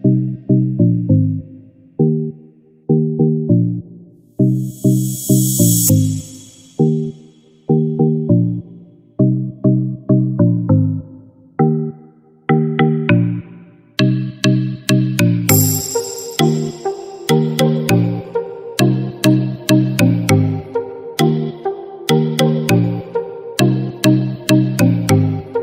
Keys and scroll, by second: 23.6 ctrl+-.